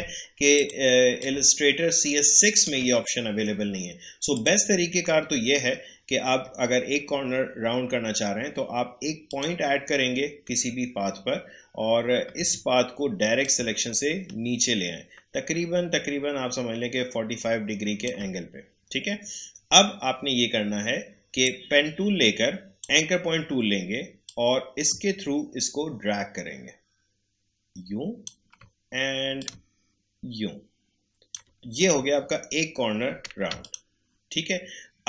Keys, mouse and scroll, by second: 0.5 click, 4.3 click, 5.4 alt+scroll up 1, 9.2 click, 12.3 a, 13.4-21.4 drag, 21.4-32.1 drag, 32.1 alt+scroll down 1, 33.6 ctrl+click.